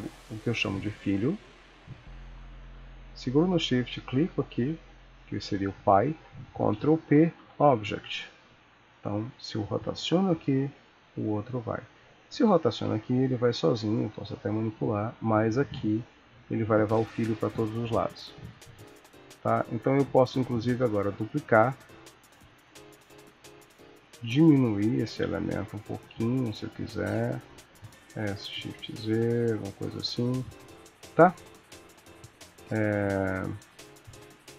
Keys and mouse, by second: 0.0 click, 3.9 shift+click, 6.7 ctrl+p, 8.9 click, 9.7 r, 12.2 click, 14.1 r, 14.1 g, 15.0 click, 15.7 g, 19.8 shift+click, 20.9 shift+d, 24.5 click, 24.5 s, 26.3 click, 26.5 s, 27.8 s, 32.4 click, 33.3 g.